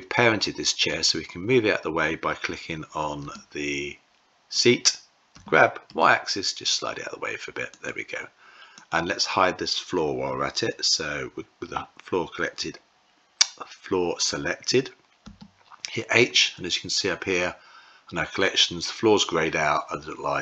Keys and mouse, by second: 0.8 click, 3.1 w, 5.3 g, 8.6 click, 15.2 h.